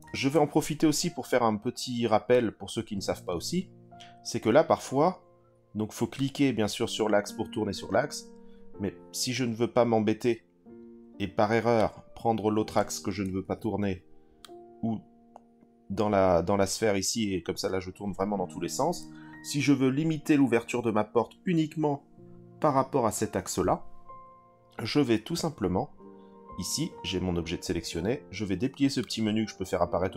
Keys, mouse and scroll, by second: 0.2 ctrl+z, 2.3 click, 6.1 click, 6.6 click, 11.8 click, 13.4 ctrl+z, 14.4 click, 18.8 ctrl+z, 29.0-30.1 drag.